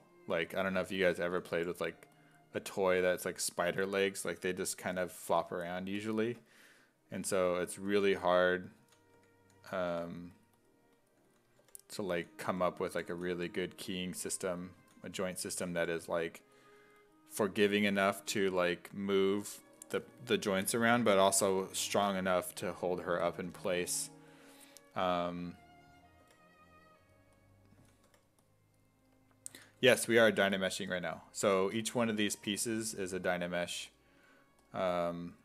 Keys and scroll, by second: 0.6 s, 1.3 s, 1.6 5, 2.6 5, 7.2-16.3 typing, 26.3 5, 27.8 s, 28.1 5, 29.5 s, 29.8 2, 30.9 2, 32.9 d.